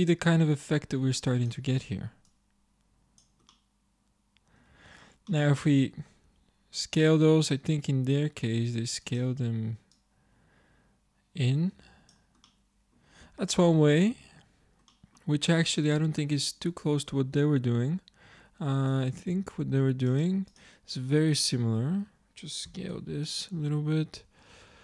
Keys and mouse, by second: 2.7 click, 4.1 middle click, 4.7 Tab, 6.3 s, 10.4-11.9 drag, 12.5 click, 13.3 Tab, 18.8 click, 19.2 shift+a, 22.7 s, 24.5 Tab.